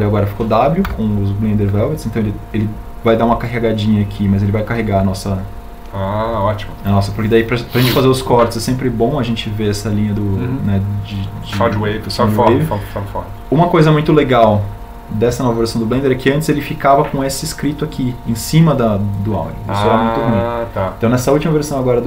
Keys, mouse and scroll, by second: 1.2 w.